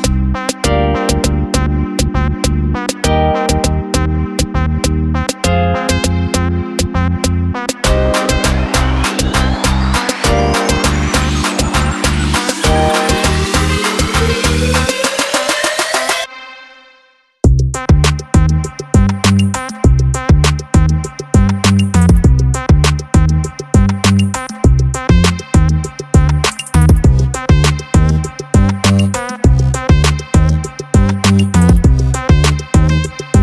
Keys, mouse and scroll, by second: 0.9 click, 1.7 click, 2.6 click, 3.0 click, 4.2 click, 4.8 click, 6.5 click, 8.1 click, 17.5 click, 18.5 drag, 20.5 click, 21.8 click, 22.5 click, 23.7-25.0 drag, 25.7 click, 26.3 click, 27.0 click, 28.3 click, 29.4-33.4 drag.